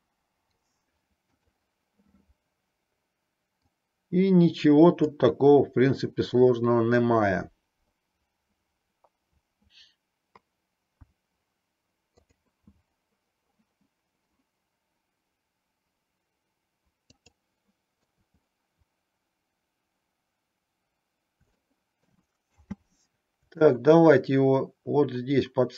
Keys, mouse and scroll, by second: 3.8-5.3 drag, 17.4-18.1 middle drag, 21.7-22.2 middle drag, 22.7 space, 23.7-25.7 middle drag.